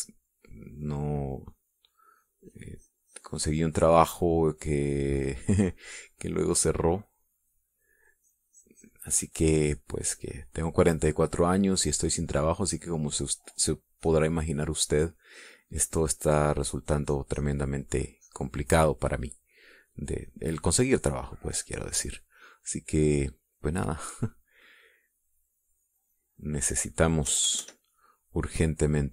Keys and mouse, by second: 2.6-7.8 drag, 8.6-13.5 drag, 14.9-19.6 drag, 20.8 click, 22.2 middle click, 22.6 click, 24.9-27.2 drag, 27.3 click, 28.3 KP_Add, 28.9 click.